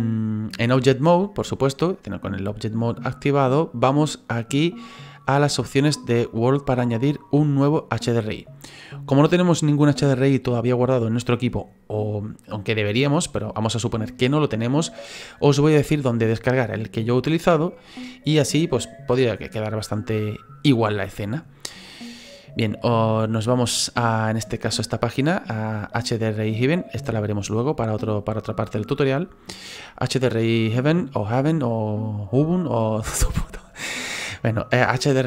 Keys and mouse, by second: 1.2 click, 1.9 click, 5.6 click, 22.4 click, 24.7 click, 27.1 click, 28.9 click.